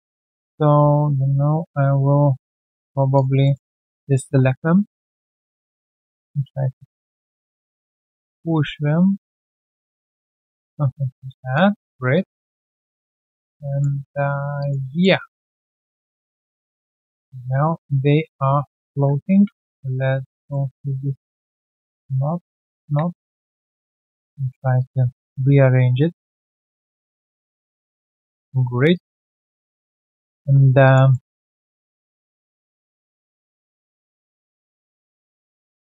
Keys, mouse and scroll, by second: 1.1 space, 1.5-1.9 scroll down 1, 2.2 alt+right click, 3.4 alt+middle click, 3.6 alt+right click, 4.0 alt+middle click, 4.2 w, 4.5 alt+right click, 10.2 alt+click, 10.8 space, 11.1 space, 11.5 alt+click, 11.8 alt+right click, 12.1 alt+click, 12.8 alt+middle click, 13.1 alt+right click, 13.2 alt+click, 13.6 alt+middle click, 14.0 alt+click, 14.3 alt+scroll down 1, 14.6 alt+click, 14.8 alt+middle click, 15.1 1, 15.4 alt+click, 15.7 alt+middle click, 16.0 alt+right click, 16.2 alt+click, 17.1 alt+click, 18.6 shift+click, 19.3 f, 23.3 shift+click, 23.9 shift+click, 23.9 alt+click, 24.2 alt+click, 28.4-28.9 alt+scroll down 1, 29.0 alt+scroll down 1, 29.1 alt+click, 29.5 alt+middle click, 29.8 alt+scroll down 1, 30.1 alt+middle click, 30.6 alt+right click, 30.8 alt+click, 31.1 alt+middle click, 31.3 alt+right click, 31.7 alt+middle click, 32.0 alt+click, 33.4 alt+click, 35.1 scroll down 1, 35.4 alt+middle click.